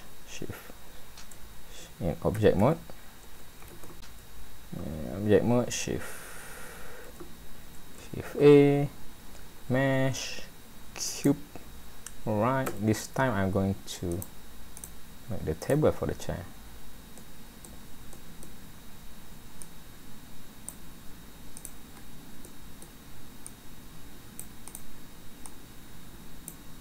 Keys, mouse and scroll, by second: 2.3 a, 7.1 alt+a, 8.3 shift+a, 11.8-12.7 scroll up 4, 12.7 Tab, 14.1 click, 14.8 click, 15.6 click, 17.2 middle click, 18.1 middle click, 19.6 click, 21.6 click, 21.9 scroll down 4, 22.4 middle click, 23.5 click, 24.7 click, 25.8 click.